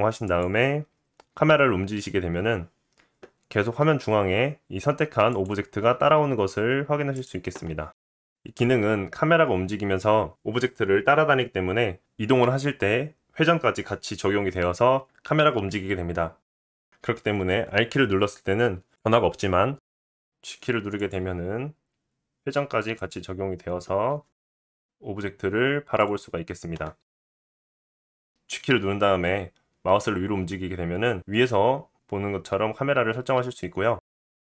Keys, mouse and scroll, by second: 0.8 click, 2.2 g, 6.1-19.7 middle drag, 17.6 r, 20.3 g, 21.2 g, 24.1 g, 28.3 g.